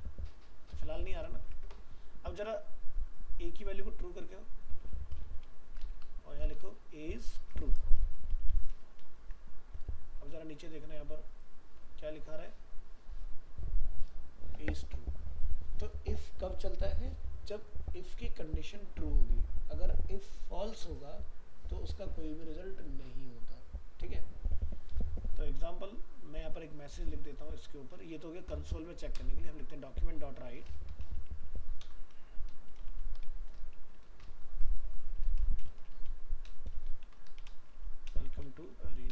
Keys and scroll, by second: 7.4 ctrl+shift+Left, 9.2 ctrl+s.